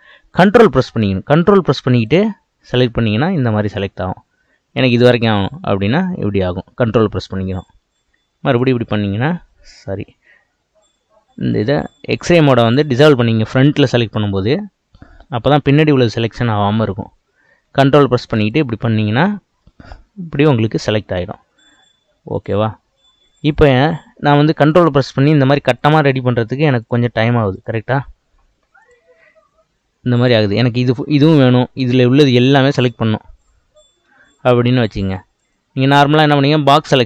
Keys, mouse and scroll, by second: 2.1 ctrl+click, 5.3 ctrl+click, 8.5 ctrl+click, 9.9 ctrl+z, 14.1-17.1 drag, 18.5 ctrl+click, 22.3 click, 24.7 click, 25.8 ctrl+click, 26.8 ctrl+click, 27.5 ctrl+click, 28.8 ctrl+click, 31.3 ctrl+click, 31.8 ctrl+click, 32.3 ctrl+click, 32.6 ctrl+click, 33.4 ctrl+click, 35.3 click, 36.4 click.